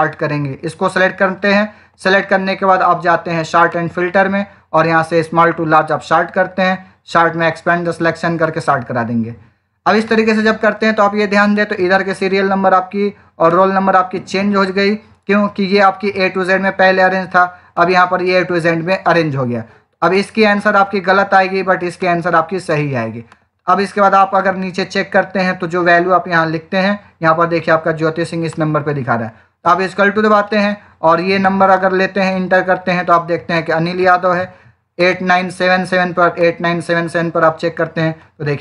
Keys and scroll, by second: 32.1 Return.